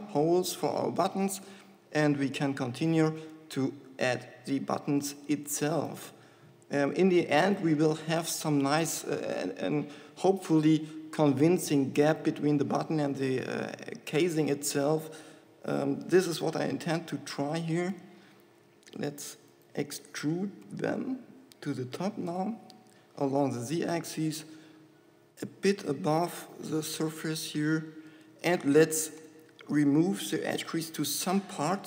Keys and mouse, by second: 0.0 Tab, 3.4 Tab, 8.6 shift+middle click, 9.2 shift+middle click, 13.5 shift+e, 20.1 click, 20.6 e, 29.4 shift+e.